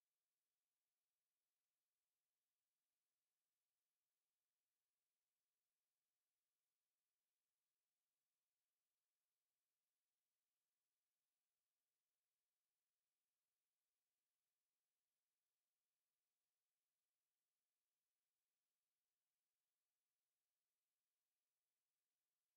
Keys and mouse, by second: 15.9 ctrl+z, 17.4 right click, 18.6 click, 19.8 q, 21.0 g, 21.9 alt+click, 22.4 ctrl+z.